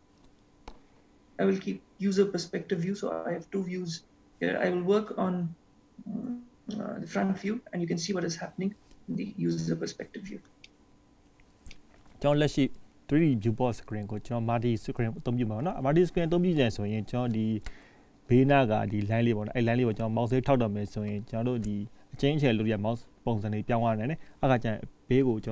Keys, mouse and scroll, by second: 0.8-2.1 scroll up 1, 9.1-10.6 scroll up 1, 10.8 shift+middle click, 11.8 middle click, 14.4-14.7 scroll up 2, 14.8 shift+middle click.